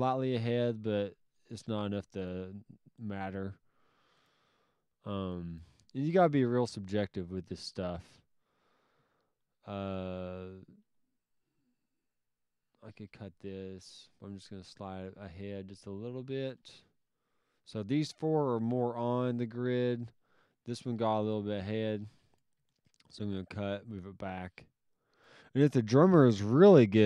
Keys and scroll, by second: 2.4 alt+s, 4.4 s, 21.4 alt+s.